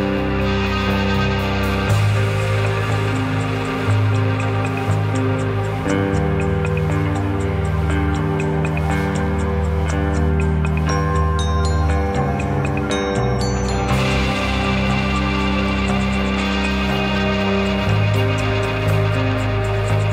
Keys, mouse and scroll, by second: 10.0 click.